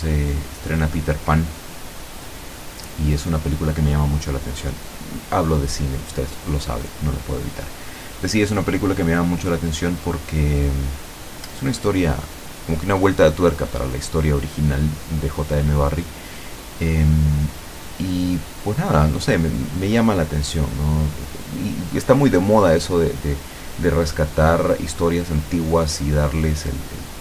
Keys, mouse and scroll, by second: 0.9 ctrl+click, 2.0 ctrl+click, 2.8 ctrl+click, 4.3 ctrl+middle click, 5.5 ctrl+click, 7.7 ctrl+scroll up 1, 8.2 middle click, 9.2 ctrl+click, 10.0 ctrl+click, 10.7 ctrl+click, 11.7 ctrl+click, 12.3 ctrl+click, 13.3 ctrl+scroll down 1, 13.7 ctrl+middle click, 14.5-15.1 scroll down 2, 15.5 scroll up 1, 15.8 scroll down 1, 16.7 scroll up 1, 17.4 click, 18.2 click, 19.8 f, 20.6 click, 21.2-22.2 drag, 22.4 click, 22.9 click, 23.3 middle click, 24.4 click, 25.1 click, 25.6-27.0 drag, 25.9-27.0 right drag, 27.1-27.2 drag.